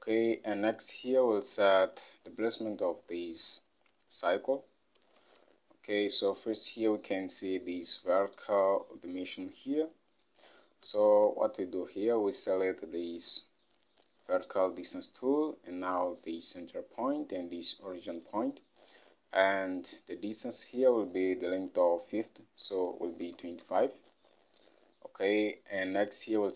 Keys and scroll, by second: 5.3 ctrl+Tab, 23.0-24.0 typing.